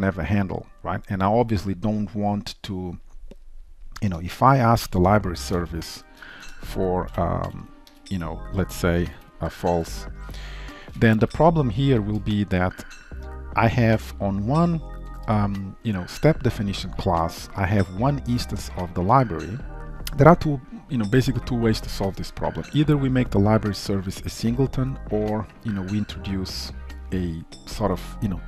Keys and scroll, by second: 6.5 Return, 10.1 ctrl+shift+Return.